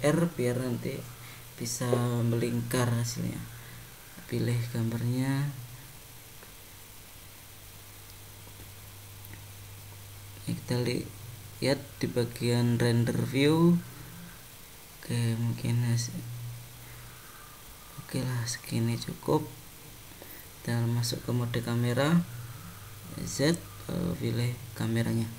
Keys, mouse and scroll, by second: 10.9 click, 11.8 middle click, 15.5 middle click, 19.9 click, 21.8 `.